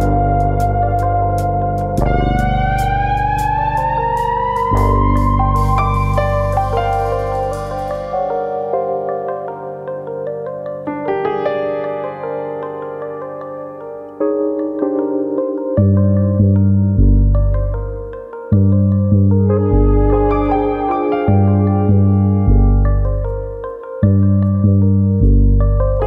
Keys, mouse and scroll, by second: 0.0 click, 0.2 middle click, 0.6 scroll down 2, 0.8 middle click, 1.1-1.8 scroll up 3, 1.3 middle click, 2.5 alt+click, 2.7 middle click, 3.4 g, 4.3 click, 4.5 middle click, 4.8-5.3 scroll down 2, 5.1 middle click, 5.3 scroll up 1, 6.1 alt+click, 6.1 scroll up 1, 6.3 middle click, 7.0 click, 7.8 middle click, 8.3 scroll down 3, 8.6 shift+middle click, 8.8 middle click, 9.1 Tab, 9.5 Tab, 9.7 middle click, 10.7 KP_1, 12.2 click, 12.7 click, 14.2 ctrl+KP_Add, 14.3 ctrl+KP_Add, 14.5 ctrl+KP_Add, 15.9 click, 17.1 ctrl+KP_Subtract, 18.2 click, 19.2 click, 21.0 alt+click, 21.7 alt+click, 21.8 click, 22.9 middle click, 24.1 click, 25.5 click, 25.8 click.